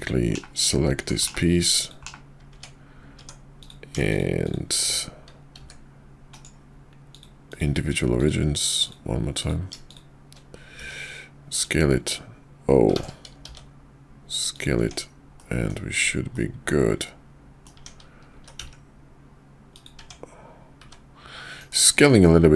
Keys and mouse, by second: 0.3 /, 1.0 Tab, 1.3 /, 1.8 click, 2.0 /, 2.5 Tab, 5.5 s, 7.4 click, 8.8 click, 9.3 click, 9.8 shift+click, 10.7 s, 12.9 ctrl+z, 13.4 s, 14.8 Tab, 15.4-15.7 middle drag, 16.3-17.7 middle drag, 18.1 s, 20.0 Tab, 20.7 `, 21.6 KP_5.